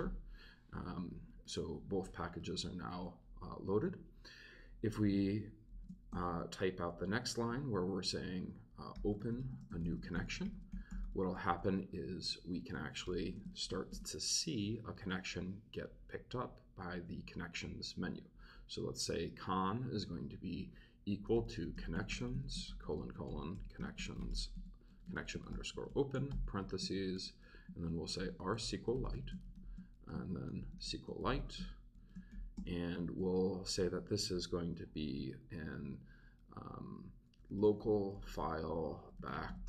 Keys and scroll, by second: 2.4 Return, 2.9 Return, 5.7 shift+3, 6.1 shift+space, 8.7-11.6 typing, 12.7-14.2 typing, 21.0-33.0 typing, 27.1 shift+Return, 27.7 shift+Return, 37.1-39.6 typing.